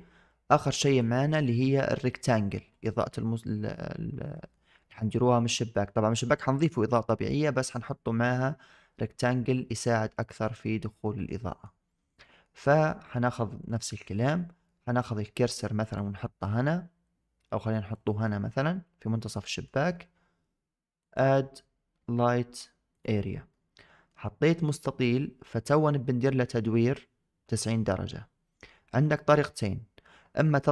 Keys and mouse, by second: 0.8 click, 2.9-3.6 middle drag, 4.2 shift+middle drag, 4.8-5.4 middle drag, 9.8-10.3 middle drag, 10.9 shift+middle drag, 11.3 middle drag, 11.8 shift+middle drag, 12.1 middle click, 12.5 middle click, 14.5-14.8 middle drag, 15.7 click, 17.8 click, 18.5-19.5 middle drag, 21.0-22.9 drag, 23.4-24.0 middle drag.